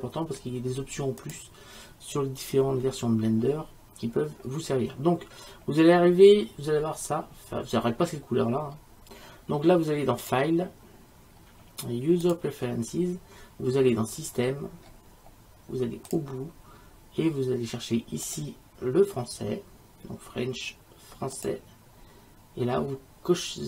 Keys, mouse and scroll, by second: 10.3-12.1 drag, 12.1 middle click.